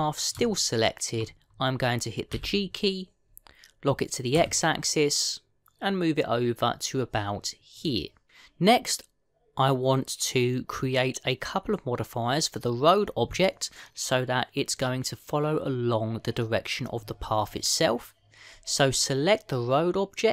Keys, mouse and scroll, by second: 1.2 shift+middle click.